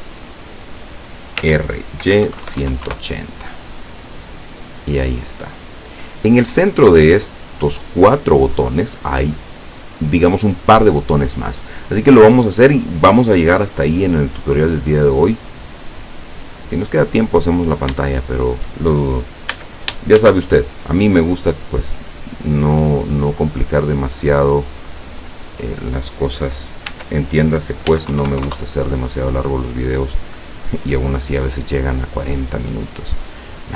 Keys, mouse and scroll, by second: 1.5 r, 2.4 KP_1, 2.5 KP_8, 2.7 KP_0, 2.9 KP_Enter, 4.4-6.1 middle drag, 12.6 scroll down 2, 14.4 scroll up 2, 16.3-17.3 middle drag, 17.6-17.9 scroll down 2, 18.2 shift+middle click, 19.5 a, 20.2 shift+a, 21.5 click, 22.6 middle click, 23.8 click, 25.1-26.2 middle drag, 27.0 r, 28.0 x, 28.2 KP_9, 28.3 KP_0, 28.5 KP_Enter, 30.0 scroll up 2.